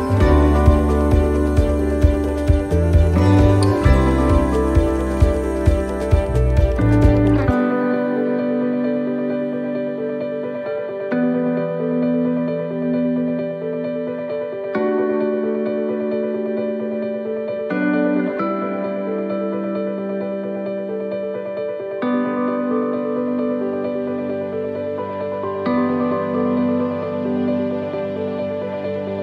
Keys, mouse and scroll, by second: 0.8 middle click, 0.8 click, 3.3 middle click, 4.5 scroll down 2, 5.1 middle click, 7.3 click, 9.3 middle click, 9.8-10.3 scroll down 3, 10.3 shift+middle click, 10.8 scroll down 1, 11.2 shift+middle click, 11.7-12.2 scroll up 2, 12.2 shift+middle click, 12.9-13.3 scroll up 3, 13.5 shift+middle click, 14.1-14.8 scroll down 2, 18.0 shift+middle click, 18.4-19.1 scroll up 3, 19.1 shift+middle click, 19.5-21.0 scroll down 1, 21.0-21.6 scroll down 1, 24.4 click, 25.6 middle click, 26.0 scroll up 1, 26.8 click, 26.8-27.4 scroll up 2, 27.6 right click, 28.3 middle click.